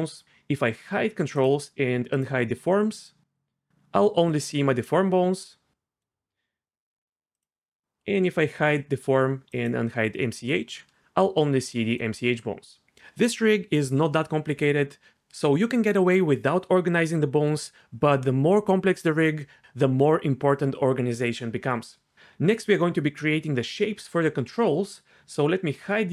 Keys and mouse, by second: 2.1 click, 7.3 click, 9.5 click.